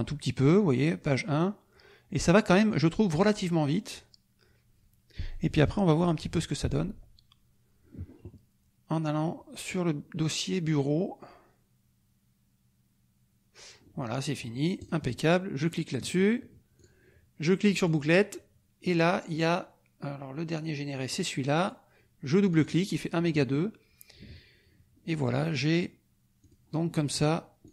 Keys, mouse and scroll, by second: 14.8 click, 15.6 click, 16.7 click, 17.7 click, 21.1-22.8 drag, 25.5 click, 26.4 click, 27.6 click.